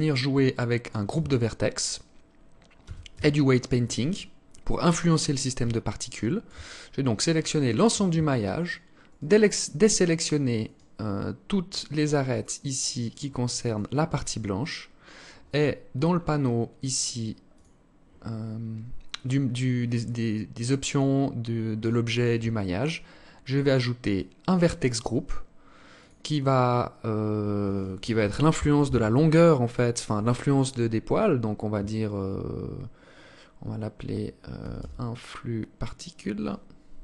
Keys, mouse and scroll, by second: 0.7 Tab, 1.8 scroll up 2, 2.3 a, 2.6 a, 5.3 alt+shift+click, 6.3-6.6 scroll up 3, 8.1 alt+shift+right click, 8.6 alt+shift+right click, 10.1 alt+shift+right click, 11.2 alt+shift+right click, 11.8 alt+shift+right click, 12.5 alt+shift+right click, 13.2 alt+shift+right click, 13.7-14.1 scroll down 6, 14.4-14.7 scroll up 3, 15.5-15.9 scroll down 2, 16.9 click, 22.2 scroll down 2, 23.5 click, 25.3 click.